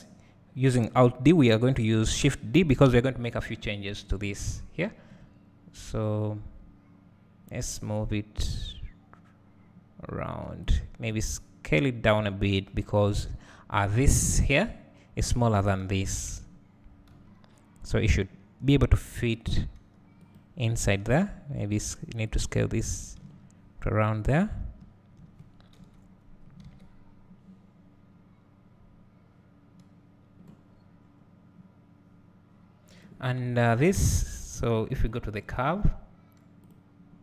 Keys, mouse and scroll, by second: 4.9 shift+d, 11.1 s, 17.2 g, 20.9 s, 23.4-24.8 middle drag, 24.8-26.7 drag, 26.7 alt+a, 30.1-34.0 scroll down 1, 34.0 click, 34.9-35.6 scroll up 1, 36.7 click.